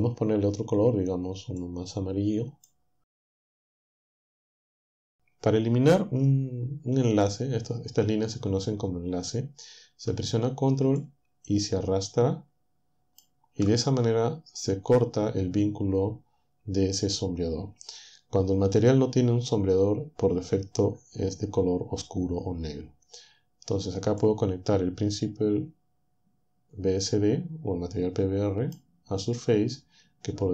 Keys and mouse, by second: 1.6-2.8 drag, 11.0-13.4 ctrl+drag, 24.2-29.0 drag.